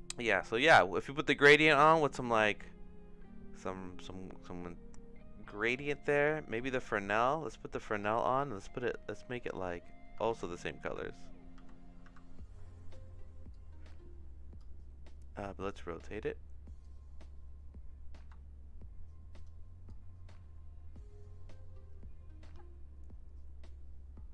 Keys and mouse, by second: 1.4 middle click, 2.1-5.5 drag, 5.8 middle click, 6.5-8.0 drag, 10.2 ctrl+c, 10.8 ctrl+v, 11.5 ctrl+c, 12.0 ctrl+v, 13.6-14.6 drag, 16.8-19.4 drag, 19.9-24.3 drag.